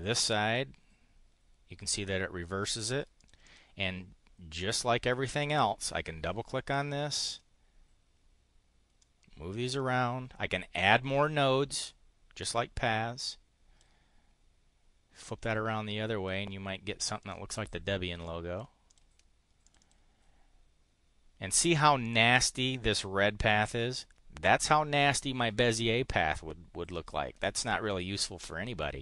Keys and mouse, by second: 3.2 click, 3.4 click, 4.6 click, 6.6 click, 7.4 click, 9.0 click, 9.7 click, 10.8-12.6 drag, 13.2 click, 15.4-16.4 drag, 17.2 click, 17.5 click, 18.2 click, 18.9 click, 19.6 click.